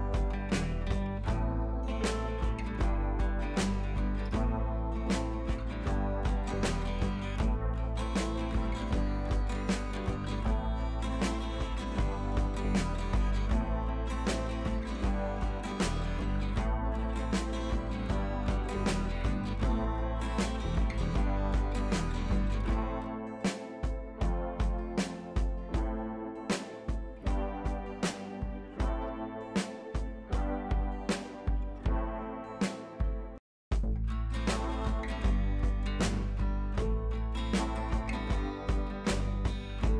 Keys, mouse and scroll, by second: 0.7-1.0 scroll down 1, 1.9 click, 4.1 ctrl+c, 4.4 click, 5.0 ctrl+v, 7.4 click, 7.9 ctrl+a, 8.2 ctrl+v, 8.9 click, 9.8 ctrl+c, 10.3 click, 11.0 ctrl+a, 11.3 ctrl+v, 13.8 ctrl+a, 14.4 click, 17.8-24.7 drag, 33.6 ctrl+c, 34.1 click, 34.6 ctrl+v, 35.2 click, 35.9 Left, 36.6-37.4 scroll down 1, 37.5 ctrl+t, 38.2-38.7 alt+click, 39.2-39.7 scroll up 2, 39.7 shift+click.